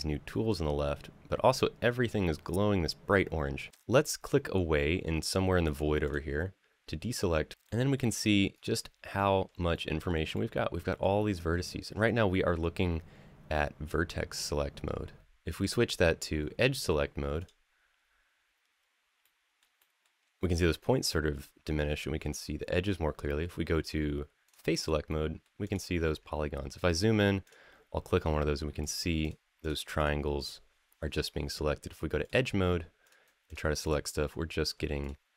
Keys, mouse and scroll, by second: 3.7 click, 3.7 a, 5.8 click, 7.5 middle click, 8.3-9.3 scroll up 2, 9.5 shift+middle click, 10.1 middle click, 11.0 scroll down 2, 11.4 shift+middle click, 17.2 click, 19.0 middle click, 19.6 shift+middle click, 24.3 click, 24.9 middle click, 25.4 click, 26.0 scroll up 2, 27.2 click, 28.6 click, 29.0 click, 29.4 click, 29.7 click, 30.1 click, 32.1 click, 32.8 click, 33.2 click, 33.6 click, 34.8 shift+click.